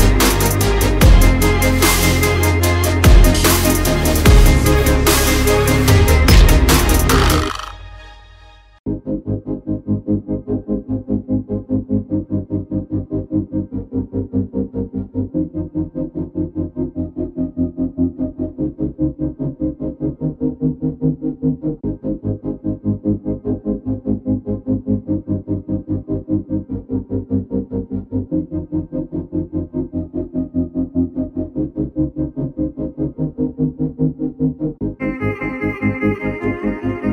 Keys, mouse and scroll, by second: 0.0 alt+scroll down 1, 0.8 click, 2.0 right click, 2.9 click, 3.3 alt+scroll up 1, 4.1 click, 5.9-7.2 typing, 8.0 click, 10.4 click, 12.8 click, 13.3 alt+scroll, 13.4 alt+scroll up 1, 13.6 click, 16.4 alt+scroll down 1, 17.4 alt+scroll, 17.5-17.9 alt+scroll up 1, 18.0 alt+click, 18.7 alt+scroll up 1, 19.1 click, 19.6 alt+click, 20.9 alt+shift+click, 22.0 click, 22.3-22.8 alt+scroll down 1, 23.1 alt+click, 24.2 click, 24.3 alt+scroll up 1, 24.9 click, 26.7-28.8 typing, 31.1 9, 32.7-33.3 typing, 34.1 click, 34.8 alt+click, 36.5 alt+click.